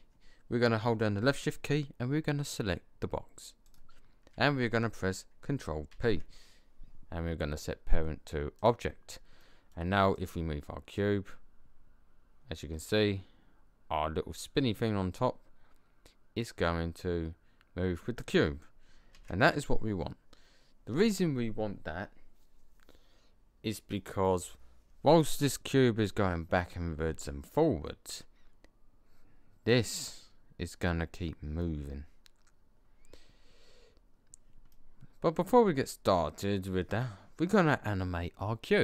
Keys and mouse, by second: 3.6 right click, 5.3 right click, 5.8 ctrl+p, 10.9-11.4 middle drag, 11.5 middle drag, 11.7 middle click, 19.0 ctrl+z, 34.6 middle click, 35.2-36.5 middle drag.